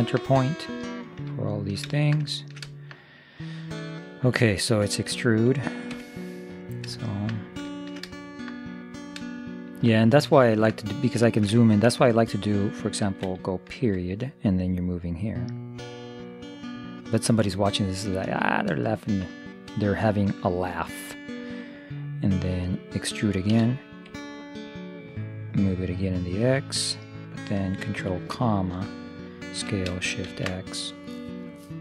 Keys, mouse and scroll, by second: 0.1-4.7 middle drag, 5.1 e, 7.0-13.5 middle drag, 13.9 ., 15.2-17.0 drag, 18.0-21.7 middle drag, 23.5 e, 25.3-27.3 drag, 28.2 ctrl+,, 29.7 s.